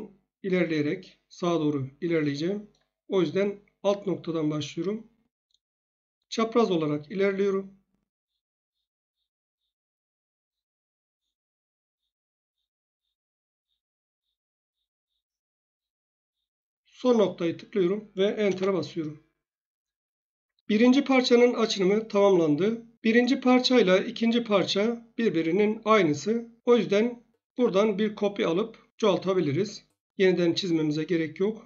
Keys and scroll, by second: 18.4 Return.